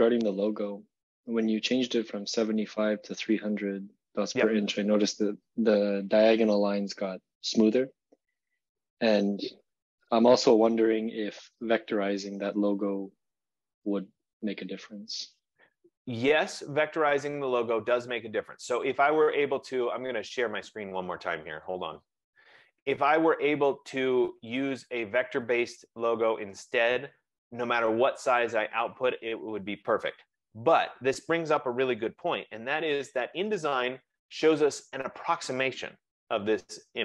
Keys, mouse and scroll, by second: 28.9 click, 32.7 ctrl+=, 33.4 ctrl+=, 34.1 ctrl+=.